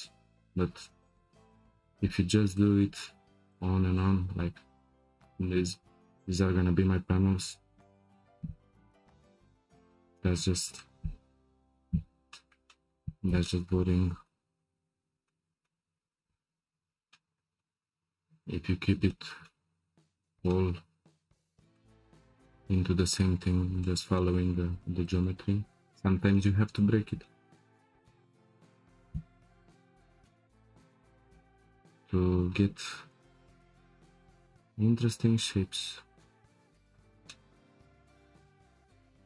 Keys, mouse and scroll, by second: 0.8 click, 1.7 3, 2.5 click, 3.5 shift+click, 3.9 shift+click, 6.2 e, 11.7 ctrl+z, 12.3-14.8 shift+middle drag, 14.8-15.2 scroll up 2, 15.2-16.6 shift+middle drag, 16.6-17.1 scroll down 3, 17.1-18.1 shift+middle drag, 18.1-18.5 scroll up 2, 18.5-19.1 scroll down 5, 19.1-23.5 shift+middle drag, 23.8-25.2 shift+middle drag, 25.2 scroll up 1, 25.2-25.7 middle drag, 25.7 scroll up 1, 25.9-26.7 shift+middle drag, 26.7-27.2 scroll up 5, 27.2-29.5 shift+middle drag, 29.5 Tab, 29.7 click, 30.1 Tab, 31.0 1, 32.9 ctrl+shift+b.